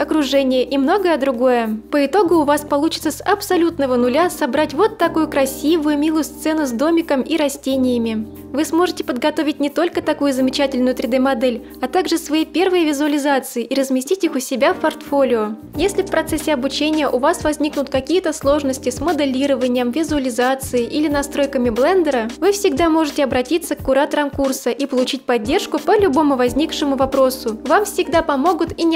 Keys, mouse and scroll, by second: 0.5 shift+middle click, 2.4 middle click, 6.5-8.3 middle drag, 8.5-8.9 scroll down 5, 9.3 shift+middle click, 10.2 scroll down 1, 10.9 shift+middle click.